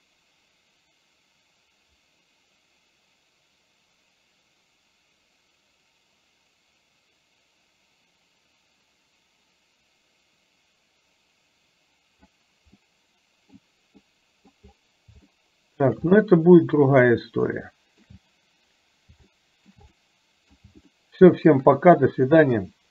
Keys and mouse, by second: 12.8 middle click, 14.1 middle click, 15.2 shift+middle click, 16.2 middle click, 17.7 shift+middle click, 19.3 shift+middle click, 20.1 middle click, 20.9 shift+middle click.